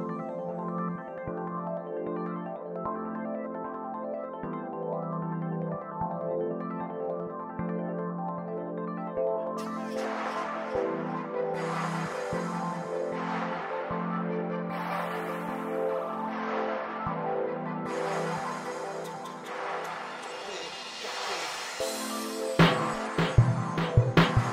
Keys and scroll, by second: 1.0 space, 2.5 p, 4.2 Escape, 4.7 super+z, 6.1 1, 6.2 Return, 6.6 space, 7.8 o, 8.7 f, 13.3 space, 14.4 p, 17.5 space, 18.2 Escape, 20.4 super+g, 23.6 o.